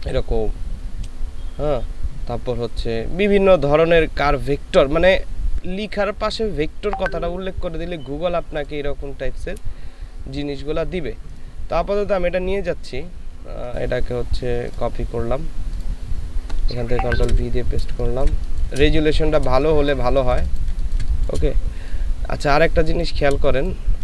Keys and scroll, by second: 17.3 ctrl+v, 17.9 ctrl+space, 19.5 space, 23.4 space.